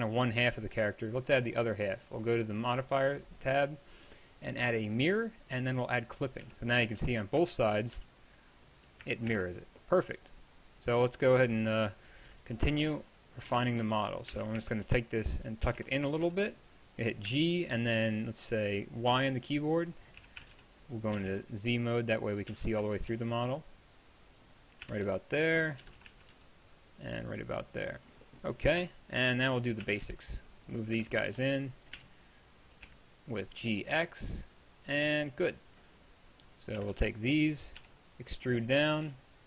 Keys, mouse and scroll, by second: 6.5 z, 6.9 z, 7.4 Tab, 8.0 g, 9.3 ctrl+z, 12.3 KP_3, 12.7 a, 12.9 b, 13.5 g, 20.2 z, 20.4 a, 20.5 b, 21.2 g, 22.5 g, 24.9 a, 25.1 b, 25.8 g, 28.8 KP_1, 29.9 a, 30.1 b, 31.0 g, 36.8 a, 36.9 b, 37.8 e, 39.1 g.